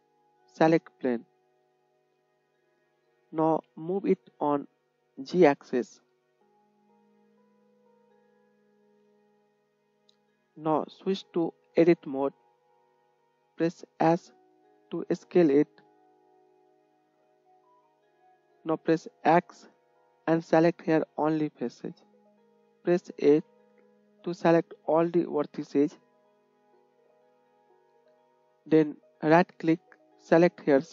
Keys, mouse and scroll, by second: 1.1-8.5 drag, 2.9 g, 9.6-30.3 drag, 11.9 Tab, 14.0 s, 19.5 x, 23.4 a, 30.3 right click.